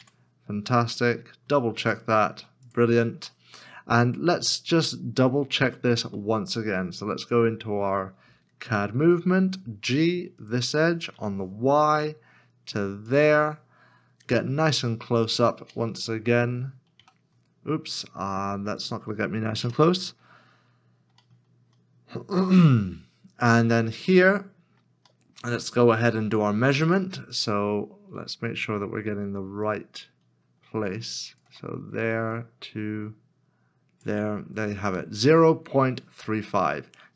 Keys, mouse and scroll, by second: 0.0 Tab, 1.4 q, 3.4 middle click, 4.2 scroll down 1, 4.9 scroll down 1, 5.0 middle click, 5.9 shift+middle click, 8.6 alt+c, 9.2 g, 12.4 y, 15.2 y, 15.2 scroll up 1, 15.9 shift+middle click, 17.0 ., 19.6 ., 20.7 scroll up 1, 21.3 shift+middle click, 22.3 shift+scroll up 1, 23.0 scroll up 1, 23.6-24.3 scroll down 1, 24.3 middle click, 25.6 middle click, 27.4 shift+middle click, 30.7 ctrl+click.